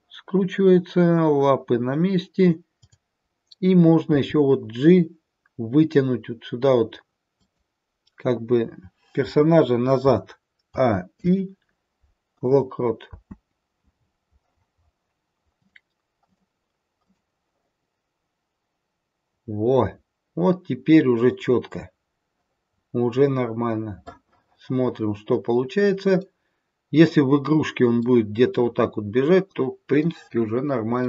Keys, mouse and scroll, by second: 2.6 click, 4.1 g, 10.6 a, 11.1 i, 13.1 space, 15.5 click, 17.1 click, 22.6-24.0 scroll down 1, 24.0 middle click, 24.0-25.9 scroll down 4, 26.1 middle click, 27.0-27.9 scroll up 2, 27.9 scroll up 1, 28.0 middle click.